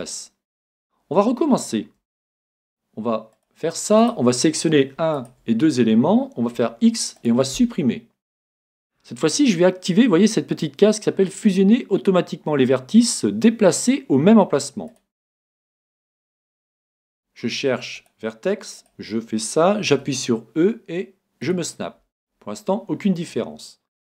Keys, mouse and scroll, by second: 2.3 ctrl+t, 4.0-7.1 right drag, 6.6 x, 14.9-16.7 drag, 17.0 ctrl+t, 18.8 right click, 19.9 e, 21.6-23.3 drag.